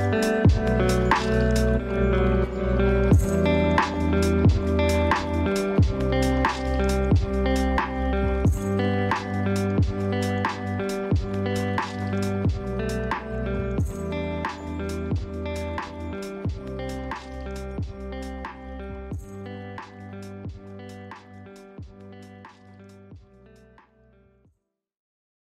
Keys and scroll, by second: 5.9 ctrl+space, 13.3 ctrl+shift+[, 13.9 ctrl+shift+], 22.2 ctrl+space.